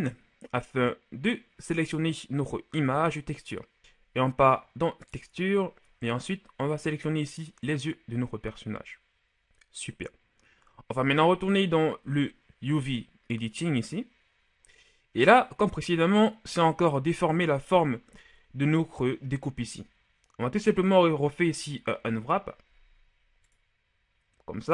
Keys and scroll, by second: 3.8 Return, 22.0 u.